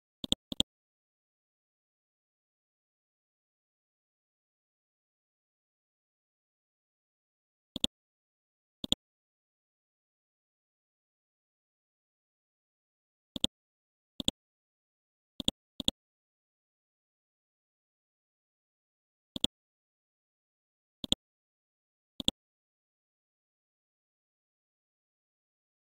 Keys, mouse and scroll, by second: 1.2 click, 1.6 click, 1.9 click, 2.1 scroll down 1, 4.7-5.3 scroll up 1, 5.5-6.0 scroll up 1, 7.7-14.3 drag, 14.3 right click, 15.4 click, 16.1 scroll down 1, 17.8-18.1 scroll up 1, 19.3 ctrl+click, 21.0 click, 22.6-24.4 scroll down 1, 25.3-25.8 scroll up 1.